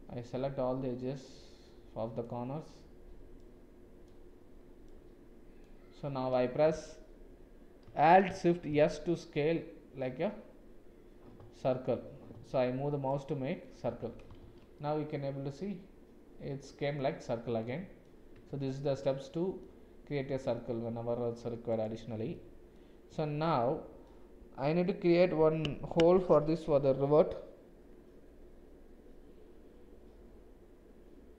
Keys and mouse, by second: 1.3 shift+click, 4.9 shift+click, 8.6 alt+shift+s, 13.9 Tab, 14.4 shift+z, 14.7 click, 18.3 Tab, 19.0 click, 20.1 click, 22.3 click, 23.6 middle click.